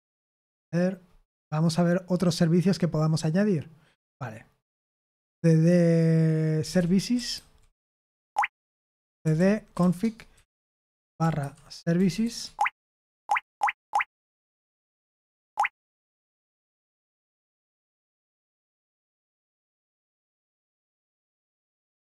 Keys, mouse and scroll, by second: 2.1 click, 6.3-12.7 typing, 13.1 Tab, 13.4 Tab, 13.7 Tab, 14.2-16.3 typing, 18.3-22.1 typing.